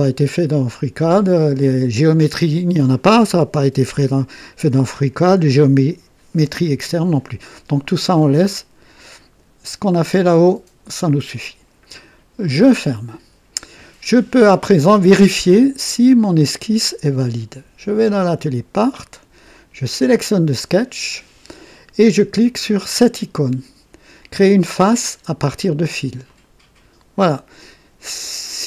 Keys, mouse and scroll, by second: 12.4 click, 16.3 click, 18.4 click, 19.9 click, 26.2 click.